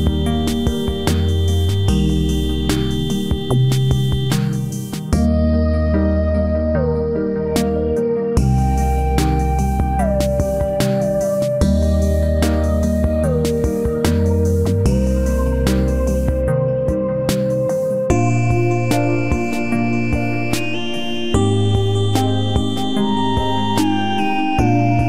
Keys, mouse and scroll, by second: 2.3-4.0 right drag, 3.3 c, 14.1 z, 15.1 middle click, 16.3-18.1 drag, 18.0 middle click, 18.1-19.1 middle drag, 19.1 Tab, 19.5 KP_3, 20.8 ctrl+s, 21.2 z, 22.1 z, 23.9 KP_3, 24.1 z.